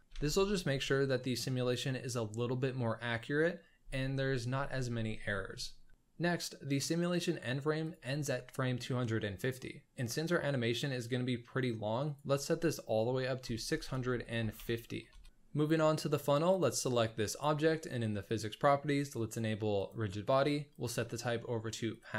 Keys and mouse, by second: 0.2 ctrl+s, 5.0 shift+middle drag, 7.8-10.2 drag, 12.0-15.3 drag, 16.5 click, 18.2 click, 20.0-22.0 drag.